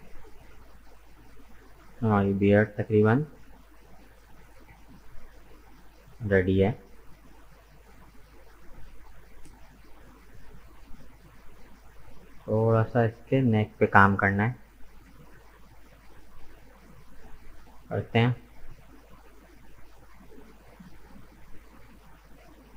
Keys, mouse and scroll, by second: 1.1-1.6 scroll down 2, 1.6 Tab, 1.7 right click, 2.2-3.5 middle drag, 3.5-3.9 scroll down 1, 3.9-5.5 middle drag, 5.5-5.8 scroll up 2, 5.8 middle click, 6.5-6.9 scroll down 2, 6.9-9.7 middle drag, 9.7-10.3 scroll up 1, 10.3 right click, 10.6 Tab, 11.1-14.2 middle drag, 15.1-15.5 scroll up 2, 15.5-16.6 middle drag, 16.6 scroll down 2, 17.1-18.4 middle drag, 18.4 scroll up 2, 18.8-21.3 middle drag, 21.3 alt+right click, 22.0-22.7 middle drag.